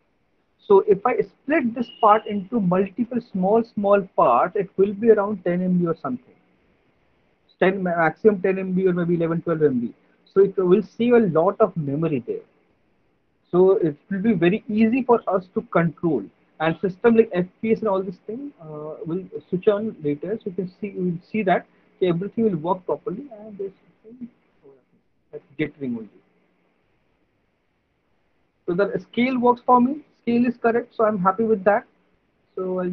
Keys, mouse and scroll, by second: 3.1 click, 4.5 click, 18.4 alt+right click, 19.0 alt+click, 20.0 alt+middle click, 20.9 alt+click, 26.9 alt+right click, 28.6 alt+click, 29.2 alt+right click.